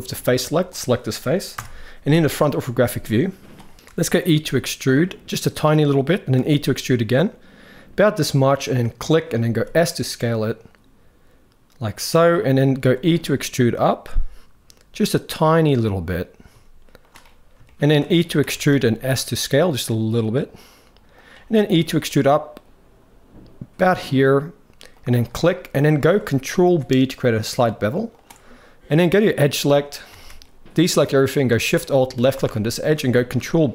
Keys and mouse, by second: 0.4 click, 1.3 KP_1, 2.0 shift+middle click, 3.9 e, 6.0 e, 9.2 s, 12.5 e, 17.3 shift+middle click, 18.1 e, 21.3 e, 25.2 middle click, 25.8 shift+middle click, 26.4 ctrl+b, 29.2 middle click, 29.9 alt+a, 31.9 alt+shift+click, 32.2 shift+middle click, 33.1 ctrl+b.